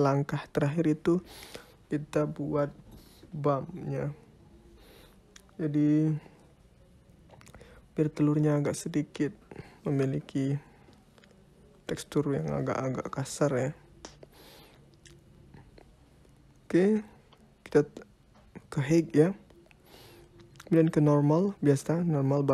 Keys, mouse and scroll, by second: 4.0 click, 7.1 click, 8.4 click, 9.4 shift+a, 15.1 click, 17.1 click, 19.4 click.